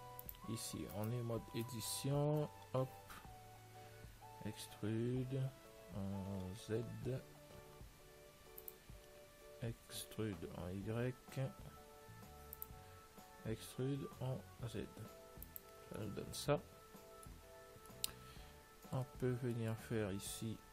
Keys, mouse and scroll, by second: 0.5 click, 1.2-3.2 right drag, 3.6-6.1 middle drag, 13.8 e, 16.3-20.7 middle drag.